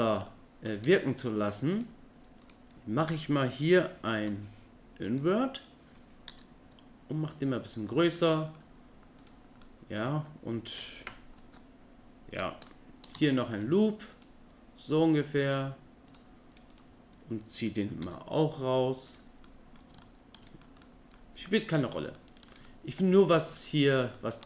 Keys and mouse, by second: 0.3 click, 1.7 click, 2.4 click, 4.2 i, 6.3 e, 8.2 click, 8.4 middle click, 9.6 click, 13.2 ctrl+r, 15.4 click, 16.7 click, 18.0 e, 19.5 middle click, 20.0 click, 20.8 click, 21.5 Tab, 22.2 middle drag, 22.7-23.2 middle drag, 23.6 middle click, 24.2 click.